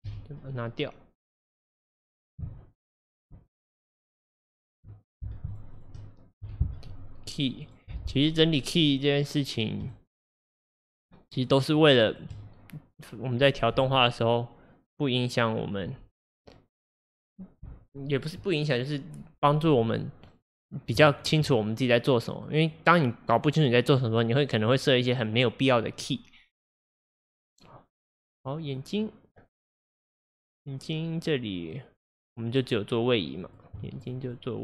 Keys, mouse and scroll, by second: 0.1 Delete, 1.2 click, 2.3 click, 3.0 click, 3.5 shift+click, 3.8 shift+click, 4.0-6.5 shift+drag, 6.5 Delete, 7.7 click, 8.8 click, 9.9 click, 10.2-10.9 shift+drag, 11.0 shift+click, 11.8 shift+drag, 12.1-13.8 shift+drag, 13.8 Delete, 15.9 Delete, 21.2-28.4 shift+middle drag, 28.4 click, 28.7 click, 29.4-29.7 scroll down 2, 30.1 click, 32.2-34.6 drag.